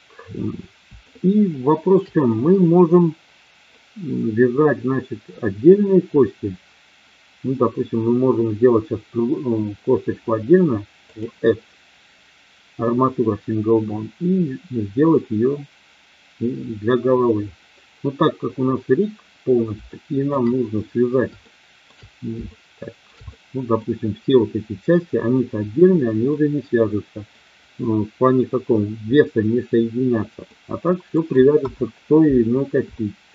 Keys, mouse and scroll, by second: 1.1-1.9 shift+middle drag, 2.3-3.8 middle drag, 11.1-13.8 drag, 19.8-20.1 shift+middle drag, 21.5-21.9 shift+middle drag, 22.4-23.0 shift+middle drag, 23.3-23.9 middle drag, 26.3-27.3 middle drag, 30.4-31.1 middle drag, 31.5 KP_1, 32.9-33.3 shift+middle drag.